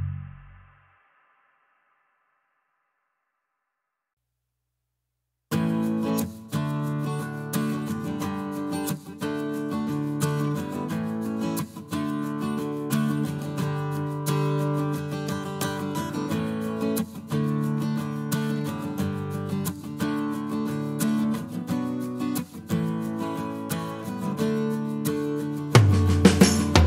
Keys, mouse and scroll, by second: 0.7 click, 1.4 click, 3.2 click, 4.0 click, 4.5 middle click, 8.8 click, 10.3-13.9 drag, 14.0 click, 14.5 click, 15.9-18.7 drag, 20.0-21.1 drag, 21.8 ctrl+z, 22.7 click, 23.6-26.0 drag, 26.2 click.